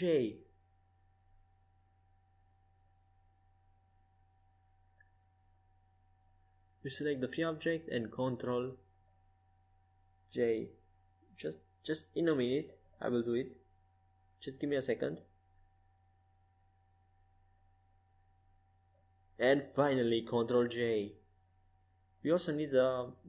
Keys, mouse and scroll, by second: 1.0 ctrl+z, 1.6 ctrl+z, 2.3 ctrl+z, 2.8 ctrl+z, 3.8 ctrl+z, 4.7 ctrl+z, 5.9-7.7 right drag, 7.7 ctrl+z, 8.1 ctrl+z, 8.9 ctrl+z, 9.6 ctrl+z, 10.3 ctrl+z, 10.9 ctrl+z, 11.4 ctrl+z, 14.5 right click, 15.4 ctrl+alt+shift+c, 16.9-20.8 right drag, 20.0 ctrl+j, 21.0 right click, 21.3-23.1 drag, 23.1 right click.